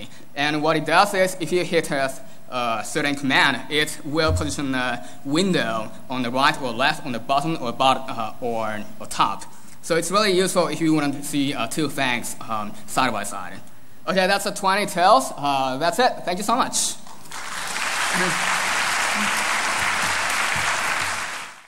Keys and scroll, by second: 0.0 ctrl+alt+super+3, 1.0 ctrl+alt+super+4, 2.2 ctrl+alt+super+m, 4.5 ctrl+alt+super+Up, 5.3 ctrl+alt+super+Down, 6.3 ctrl+alt+super+Right, 7.5 ctrl+alt+super+Left, 8.7 ctrl+alt+super+1, 9.6 ctrl+alt+super+2, 10.4 ctrl+alt+super+3, 11.5 ctrl+alt+super+4, 12.6 ctrl+alt+super+m.